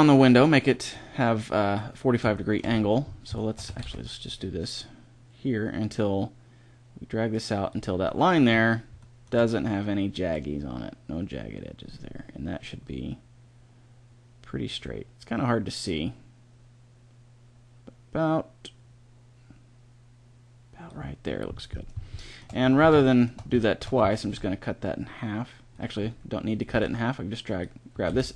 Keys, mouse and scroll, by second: 3.5 a, 3.7 b, 4.6-6.4 drag, 8.4 middle click, 10.1-12.0 drag, 21.1-25.5 middle drag, 24.1 ctrl+r, 25.9-27.4 drag, 26.5 b, 27.8 a, 27.9 b.